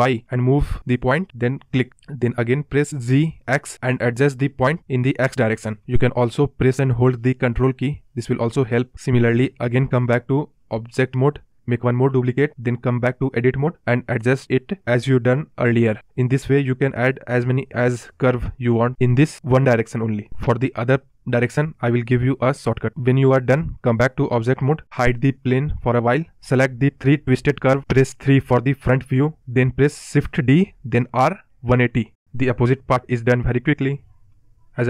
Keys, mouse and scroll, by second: 0.0 g, 3.6 Tab, 4.2 shift+d, 4.6 Tab, 5.3 g, 11.0 Tab, 11.2-12.0 drag, 12.0 Tab, 13.4 g, 15.7 Tab, 24.6 click, 25.5 click, 27.6 KP_3, 29.3 shift+d, 32.2 KP_7, 32.5 scroll down 1, 32.6 scroll up 2, 32.9 scroll down 3, 33.8 click, 34.1 click, 34.4 scroll up 3.